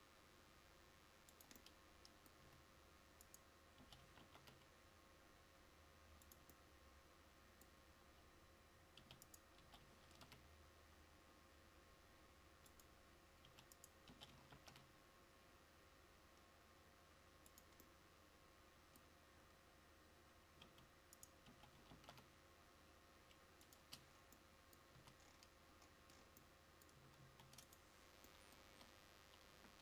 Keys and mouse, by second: 3.9 g, 9.7 g, 14.2 g, 21.6 g, 24.0 Tab, 25.1 a, 27.3 ctrl+s, 28.8 KP_0.